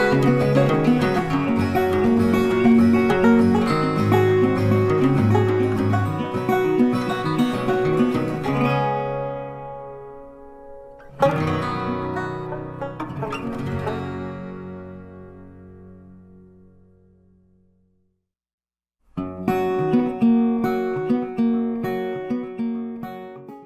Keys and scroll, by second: 0.8 ctrl+t.